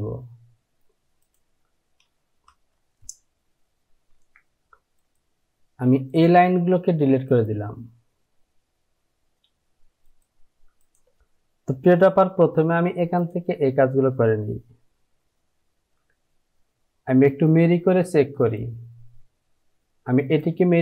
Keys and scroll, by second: 4.2 Delete, 12.4 j.